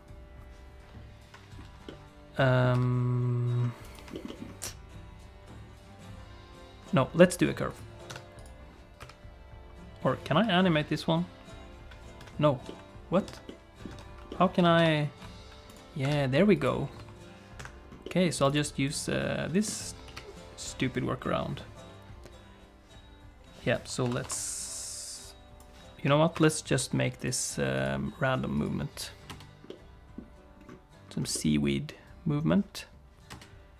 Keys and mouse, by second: 1.9 middle click, 2.7 Tab, 3.8 click, 4.1 shift+middle click, 4.3 middle click, 7.7 click, 8.1 Tab, 9.0 KP_3, 10.4 i, 12.2 Escape, 12.7 middle click, 13.3 Tab, 13.5 middle click, 13.9 Tab, 14.3 middle click, 14.8 ctrl+h, 16.0 Tab, 17.8 r, 18.0 middle click, 18.5 right click, 19.1 middle click, 20.0 KP_3, 24.0 i, 25.2 click, 26.3 shift+F6, 27.2 click, 27.4 click, 27.7 click, 29.3 space, 29.7 middle click, 31.3-32.3 middle drag, 33.3 space.